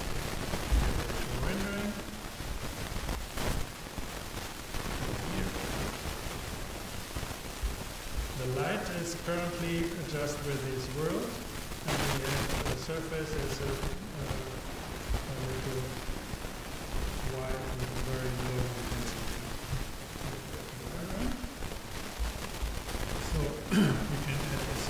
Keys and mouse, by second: 3.9-5.7 drag, 9.2-10.8 drag, 12.4-16.0 drag.